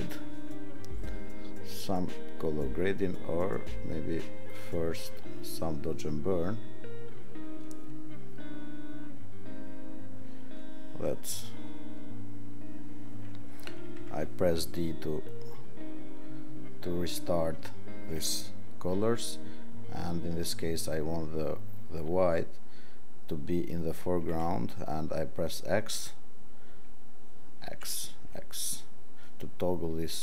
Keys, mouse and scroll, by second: 0.4 ctrl+0.